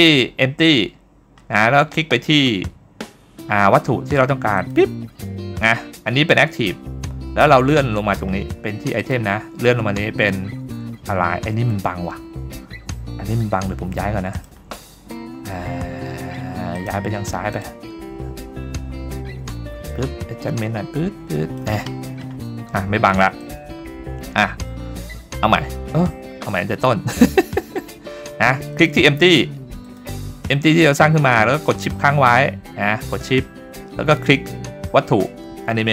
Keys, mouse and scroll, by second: 4.6 shift+click, 7.7-9.0 scroll down 1, 9.0-9.6 drag, 9.0 scroll down 2, 9.6-10.8 scroll down 2, 14.3 click, 16.7 click, 20.0 click, 21.5 click, 23.4 click, 26.5 click, 28.7 click, 29.8 click, 34.3 shift+click.